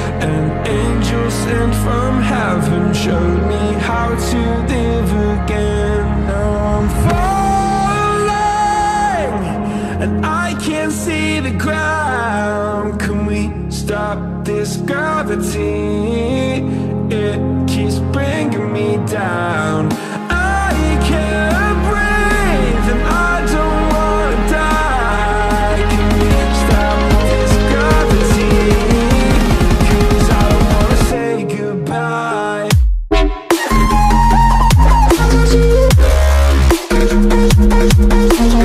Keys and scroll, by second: 2.0 Right, 3.1 Left, 5.9 Right, 21.6 5.